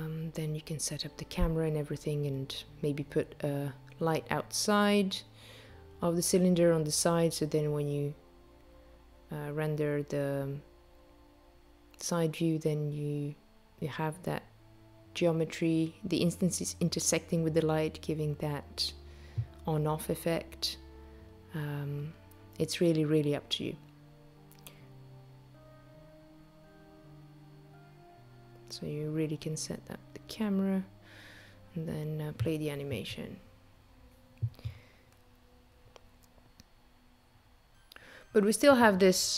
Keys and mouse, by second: 1.0 click, 7.6 click, 15.7 n, 18.2 click, 19.4 click, 23.8 click.